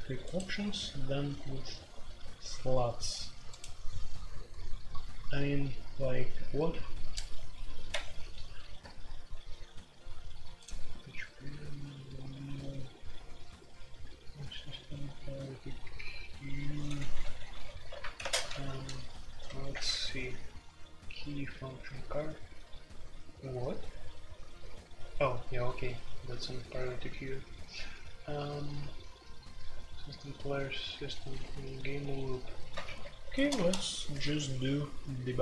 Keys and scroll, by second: 7.9 Escape, 17.9 alt+2, 18.2-19.4 typing, 19.7 Return, 26.1-27.0 typing, 29.2 typing, 30.8-31.9 typing, 32.8 alt+1, 33.4-35.4 typing, 33.5 Return.